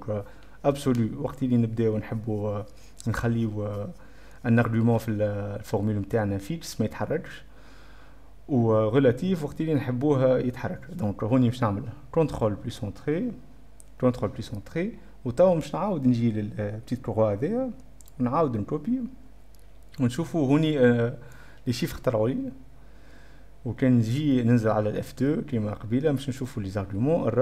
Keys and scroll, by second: 11.9 Caps_Lock, 12.0 a, 13.4 ctrl+p, 13.5 ctrl+], 13.6 ctrl+Return, 14.2 o, 26.2 F2.